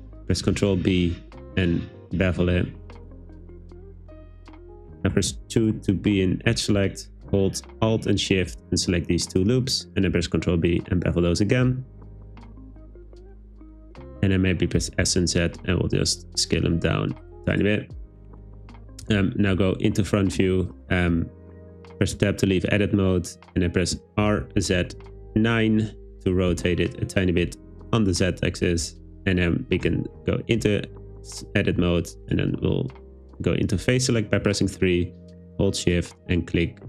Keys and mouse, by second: 0.4 super+b, 4.7 click, 5.2 2, 8.5 alt+shift+click, 10.2 super+b, 13.8 click, 14.8 s, 15.1 z, 17.3 click, 17.6 click, 22.2 Tab, 24.3 r, 24.6 z, 25.0 9, 26.5 Return, 28.9 Tab, 29.9 3.